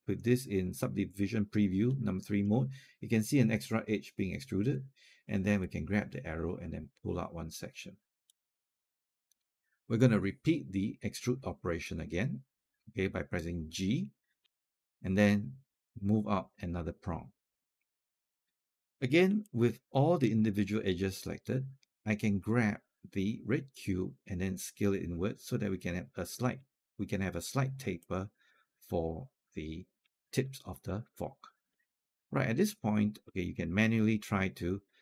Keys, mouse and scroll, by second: 5.4-9.7 drag, 14.2 g, 15.7-19.1 drag, 19.1 typing, 19.3 alt+click, 23.7-26.3 drag, 27.8 alt+click, 28.9 alt+click, 30.0 alt+click, 30.7 alt+click, 31.7 alt+click, 32.1 scroll down 1, 32.4 alt+middle click, 32.7-33.0 scroll up 1.